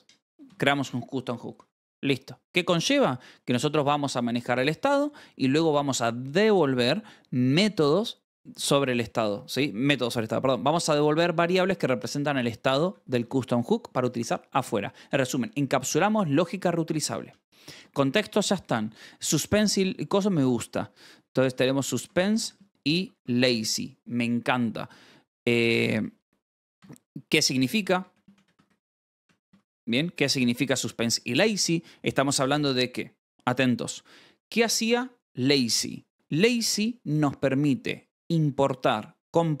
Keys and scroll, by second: 0.4 shift+v, 1.5 Escape, 2.2 j, 2.6 shift+v, 3.0 Escape, 12.8 k, 13.2 shift+v, 13.5 Escape, 13.8 j, 18.6-23.6 typing, 25.0-30.1 typing, 31.2 space.